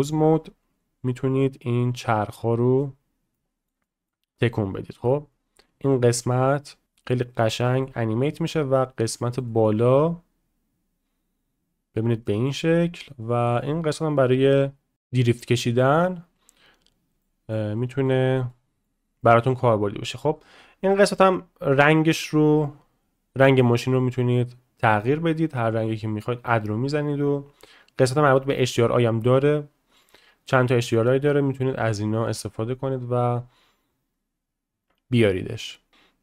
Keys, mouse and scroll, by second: 0.1 shift+click, 1.9-2.8 drag, 3.3-3.7 middle drag, 3.8 shift+middle drag, 5.2-6.8 middle drag, 6.8 ctrl+z, 7.0 middle click, 7.6 shift+middle click, 9.2 shift+middle drag, 9.5-9.8 middle drag, 11.0-12.0 drag, 12.2 drag, 14.2 middle click, 17.2-17.5 middle drag, 17.7-18.0 middle drag, 18.5-18.8 middle drag, 19.3 middle click, 22.0-25.2 drag, 30.0-32.1 drag.